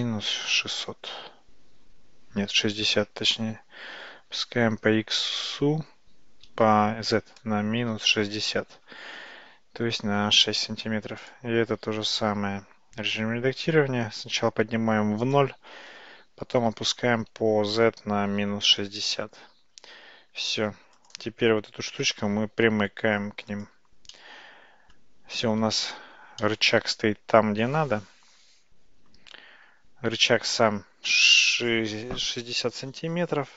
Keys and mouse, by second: 4.2 g, 10.8 Tab, 12.4 Tab, 13.7 g, 18.4 g, 20.6 Tab, 21.9 g, 24.2-25.0 middle drag, 26.5-29.2 middle drag.